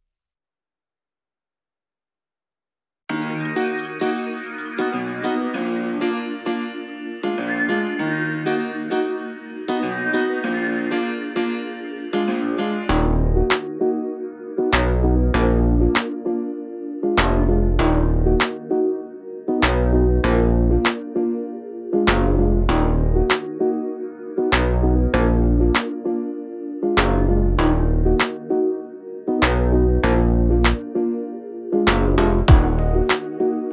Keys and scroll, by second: 7.8 space, 7.9 Escape, 8.7 l, 10.0 space, 10.8 q, 12.3-14.3 typing, 15.5 space, 16.4 Delete, 17.9 m, 18.7 space, 19.9 m, 20.8 Right, 21.1 Left, 21.4 Right, 22.7 l, 23.6 space, 24.5 Delete, 26.7 m, 27.6 Right, 28.3 Left, 29.3 l, 31.3 Escape.